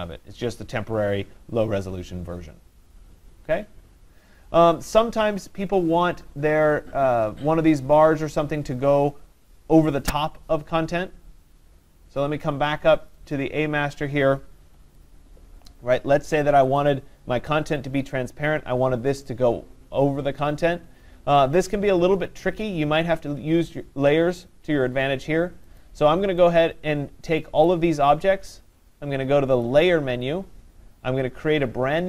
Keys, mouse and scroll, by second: 13.1 click, 13.4 click, 15.7 click, 16.8 click, 25.8 click, 27.7 click, 29.9 click.